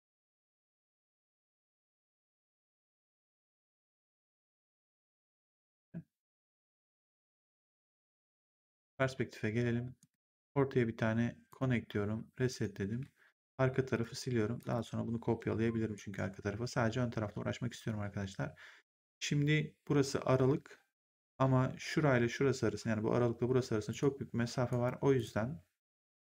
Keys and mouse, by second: 0.5 Delete, 1.0 click, 1.5 Delete, 2.9 click, 3.3 Delete, 3.7 click, 4.4 Delete, 4.9 click, 6.3 click, 7.0 Delete, 8.1 right click, 8.7 click, 9.9 right click, 10.3 click, 11.4 click, 12.8 w, 13.2 right click, 13.8 click, 14.5 shift+click, 15.6 Delete, 15.9 right click, 23.8 click, 24.6 right click, 25.1 click.